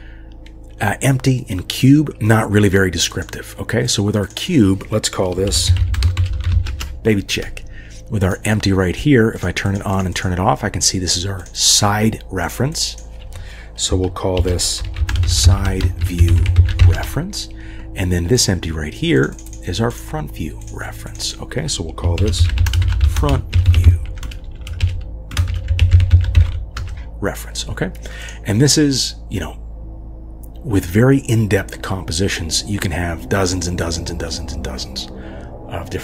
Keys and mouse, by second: 3.8 click, 4.2 click, 4.4-6.7 drag, 8.2 click, 9.4 click, 9.6 click, 9.9 click, 11.4 click, 11.6-17.0 drag, 16.6 e, 19.2 click, 19.9 click, 20.6 click, 21.0 click, 21.2-22.2 drag, 22.4 click, 23.6-24.7 drag, 23.8 e, 24.4 BackSpace, 24.5 BackSpace, 24.9 click, 25.6-26.8 drag, 26.1 e, 28.2 click.